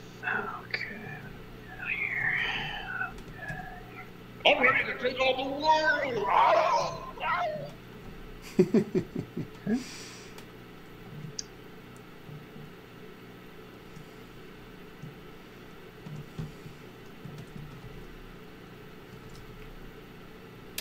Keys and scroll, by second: 1.9-3.5 typing, 4.7 space, 6.8 m, 17.0-19.8 typing.